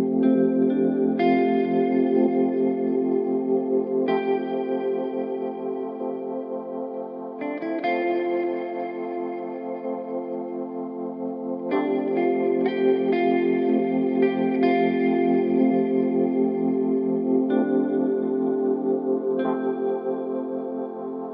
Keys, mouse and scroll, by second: 0.7-3.5 drag, 5.2-6.8 drag, 6.8-8.6 right drag, 8.0-10.1 middle drag, 13.5-15.6 middle drag.